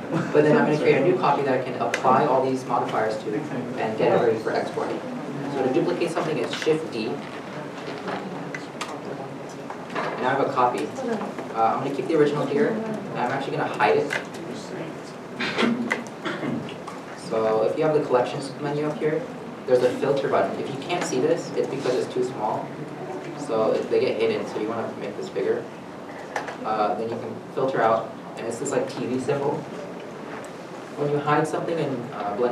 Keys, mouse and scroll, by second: 6.8 middle click, 7.2 shift+d, 8.2 shift+click, 9.1 shift+middle click.